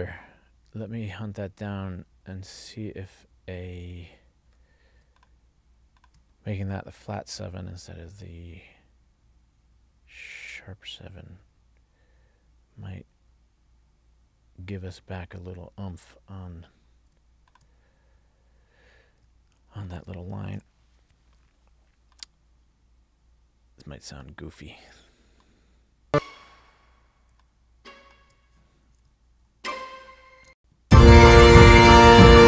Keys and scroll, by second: 29.5 alt+Down, 30.6 space.